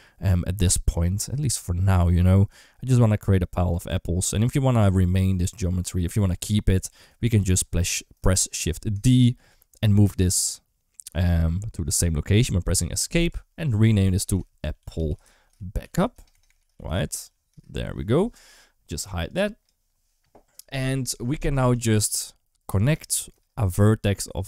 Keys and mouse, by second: 4.6 Tab, 6.7 alt+z, 8.8 shift+d, 13.1 F2, 14.6 p, 16.1 BackSpace, 16.3 BackSpace, 21.8 Tab, 22.5 alt+z.